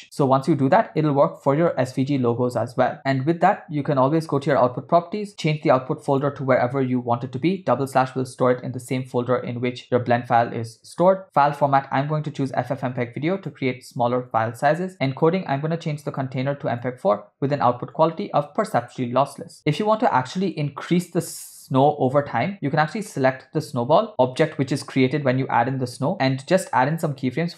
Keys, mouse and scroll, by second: 3.0 space, 4.5 click, 5.3 click, 6.1-7.7 drag, 7.2 /, 11.0 click, 13.0 click, 14.3 click, 14.9 click, 16.1-17.2 drag, 18.0-19.1 drag, 20.0 click, 22.9 drag, 27.2 click.